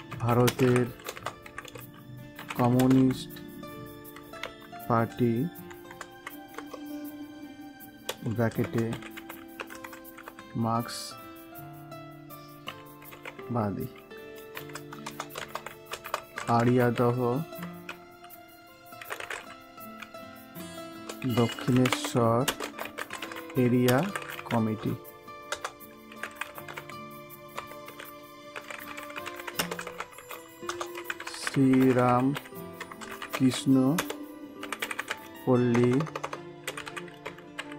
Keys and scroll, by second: 0.4 space, 2.4 BackSpace, 2.7 space, 5.6 BackSpace, 6.5 BackSpace, 8.0 space, 15.0 Return, 19.1 BackSpace, 21.7 BackSpace, 22.4 space, 23.8 space, 25.4 Return, 29.5 space, 30.6 Return, 31.2 BackSpace, 33.2 BackSpace, 33.9 space, 34.7 BackSpace.